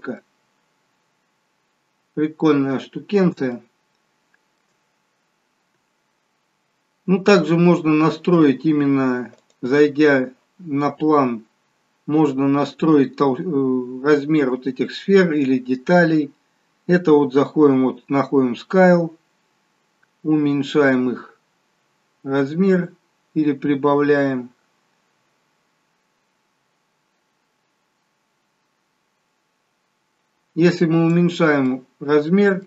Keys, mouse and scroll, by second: 0.6-1.2 scroll down 2, 2.2 scroll up 1, 3.7 shift+middle click, 5.0 scroll up 1, 8.9 scroll down 1, 9.5 click, 9.5 scroll down 1, 11.0 scroll down 1, 12.5-13.0 scroll down 6, 19.0 click, 31.9 middle click.